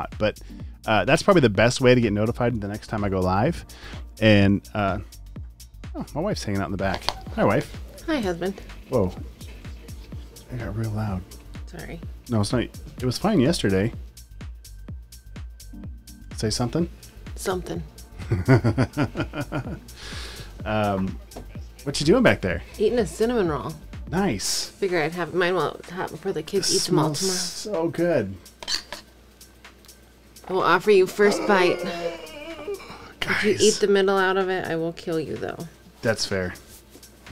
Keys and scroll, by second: 2.6 super+c.